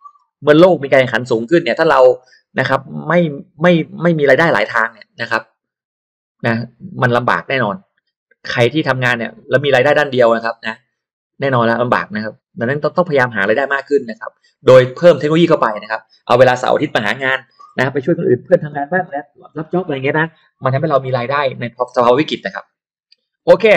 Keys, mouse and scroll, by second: 23.2-23.6 scroll down 2, 23.4 middle click.